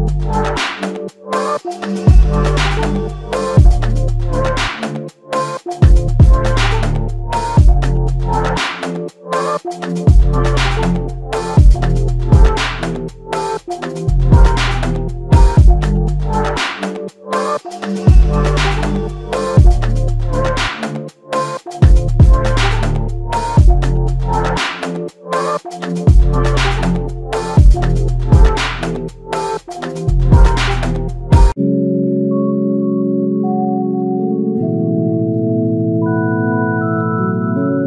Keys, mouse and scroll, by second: 1.4 alt+click, 3.5 alt+click, 6.3 alt+click, 9.9 shift+click, 11.9 alt+click, 13.5 shift+click, 14.0 alt+click, 17.3 f, 21.3-21.7 scroll down 1, 22.0 alt+click, 26.2 ctrl+alt+click, 27.1 ctrl+alt+click, 28.6 alt+shift+click, 29.1 alt+click, 29.7 shift+click, 32.5 alt+click, 33.4 alt+shift+click, 34.0 alt+click, 35.2 ctrl+alt+click, 36.3 f.